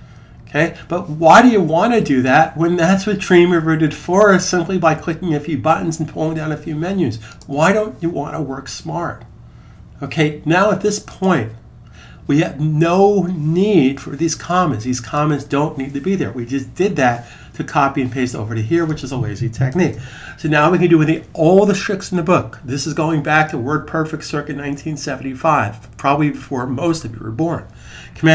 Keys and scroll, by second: 19.5 super+s.